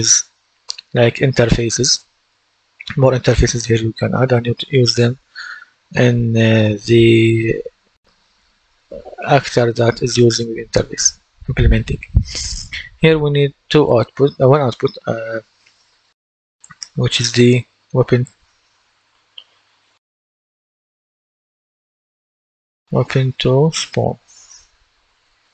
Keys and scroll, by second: 18.5-22.4 typing, 23.7-25.5 typing.